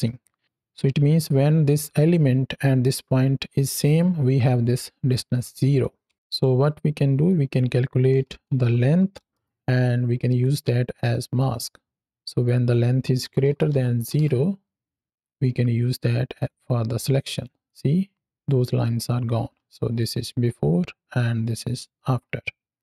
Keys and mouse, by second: 4.3 click, 5.3-5.6 drag, 6.1 ctrl+x, 7.1 click, 10.3 click, 10.9 click, 11.2 click, 12.3 click, 15.1-16.4 drag, 17.2 click, 17.5 click, 19.9 ctrl+alt+click, 21.3 ctrl+alt+click.